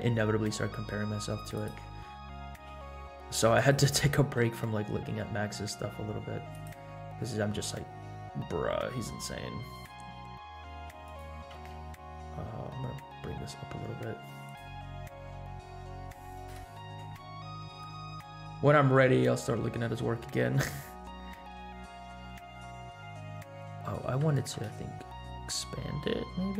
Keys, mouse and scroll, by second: 0.1 scroll up 2, 0.5-1.2 middle drag, 1.5 drag, 2.7 s, 4.3 g, 6.9-7.4 scroll down 4, 9.7-10.0 scroll down 2, 10.2-10.7 scroll up 2, 10.7 g, 11.5 g, 14.9 scroll down 1, 15.3-15.6 middle drag, 16.4 KP_0, 17.2-17.5 scroll up 2, 17.8-18.4 shift+middle drag, 19.3 scroll down 1, 19.9 middle click, 24.2 s.